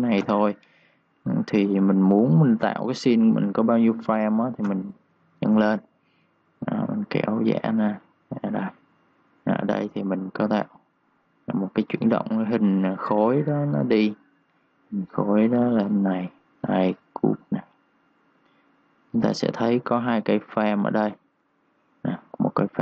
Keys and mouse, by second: 0.0 Return, 2.2 click, 3.5-3.9 typing, 4.6 Return, 6.6 click.